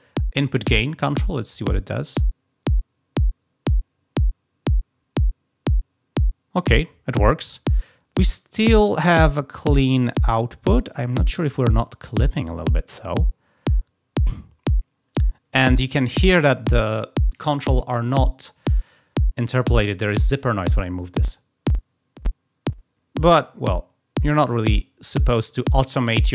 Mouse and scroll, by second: 0.4-3.7 drag, 20.9-24.7 drag.